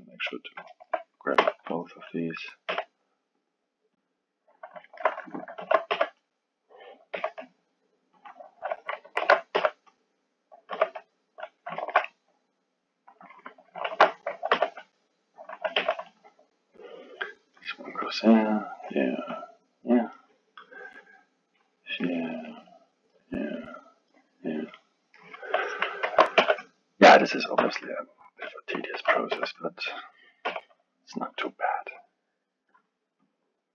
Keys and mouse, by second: 1.4 b, 2.7 g, 4.1 click, 4.8 alt+middle click, 5.6 alt+a, 5.9 b, 7.1 g, 9.2 alt+a, 9.5 b, 10.7 g, 11.8-13.9 alt+middle drag, 13.9 alt+a, 14.5 b, 15.8 g, 17.0 click, 18.1 click, 19.4 click, 21.1 click, 22.1-23.6 drag, 24.7-26.0 middle drag, 26.0 alt+a, 26.4 b, 27.6 g, 28.9 alt+a, 29.3 b, 30.5 g, 32.1 click, 33.3 click.